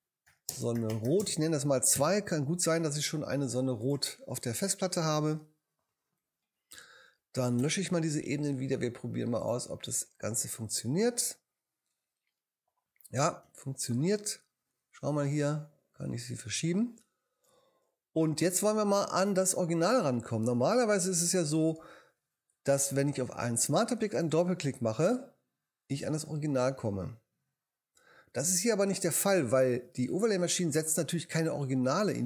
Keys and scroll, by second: 0.0-1.9 typing, 7.6 BackSpace, 13.4 v.